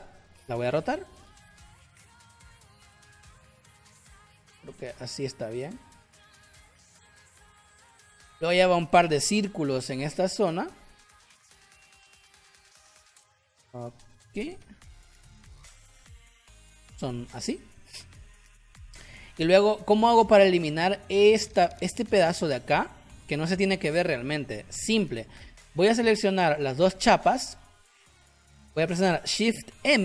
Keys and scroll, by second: 8.0 space, 15.7 v, 16.9 shift+x, 19.7 space, 24.3 ctrl+z, 29.7 shift+m.